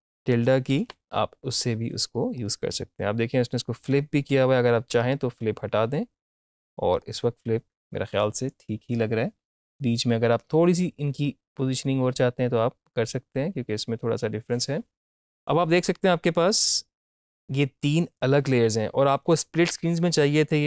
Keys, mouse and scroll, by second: 0.7 shift+`, 2.4-5.0 drag, 11.3-18.0 drag.